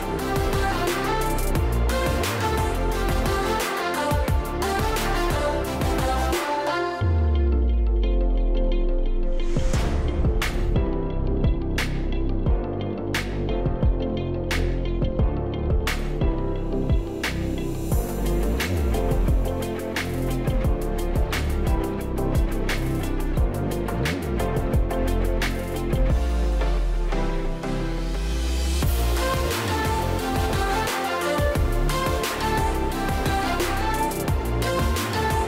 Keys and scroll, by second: 1.7 space, 18.9 shift+Right, 19.0 shift+Right, 25.6 Left, 25.8 Left, 26.0 Left, 26.1 Left, 26.4 Left, 27.2 Right.